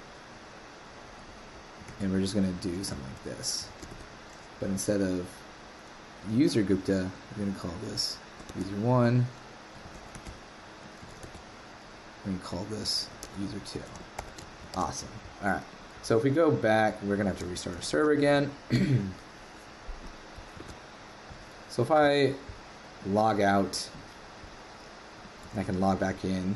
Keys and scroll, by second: 1.8 super+c, 2.9 shift+super+Right, 3.8 super+v, 9.9 super+l, 10.1 super+c, 11.0 super+l, 11.2 super+v, 14.7 super+s, 17.9 ctrl+c, 20.5 super+Tab, 25.5 super+w.